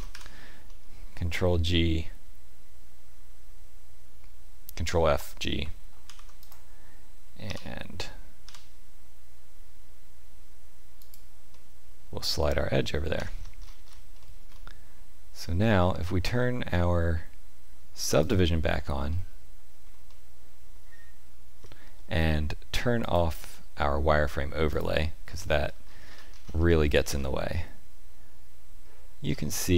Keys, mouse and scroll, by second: 0.6 middle click, 6.0 ctrl+r, 11.5 middle click, 13.1 Tab, 13.3-14.1 scroll down 12, 14.1 shift+middle click, 14.5 middle click, 18.2 click, 19.0 shift+middle click, 20.0 middle click, 23.0 click, 25.2 shift+middle click, 26.0-26.5 scroll up 6, 26.6 shift+middle click, 27.1 middle click, 29.2 scroll up 1, 29.7 scroll down 1.